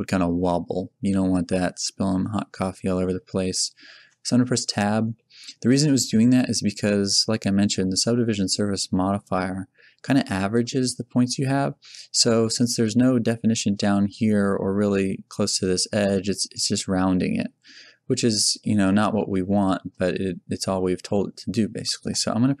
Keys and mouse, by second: 4.6 Tab.